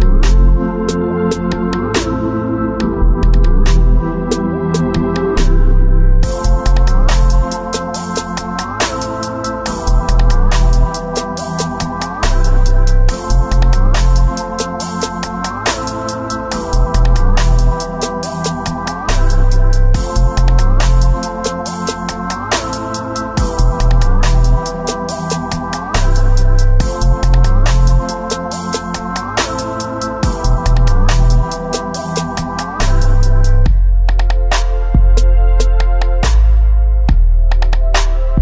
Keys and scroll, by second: 6.1 ctrl+s.